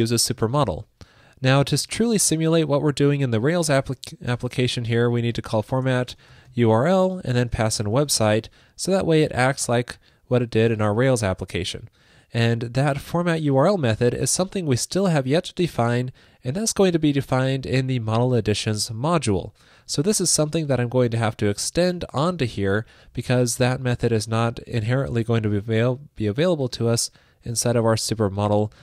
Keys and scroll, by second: 2.2 super+Right, 19.9 super+c, 22.6 super+v.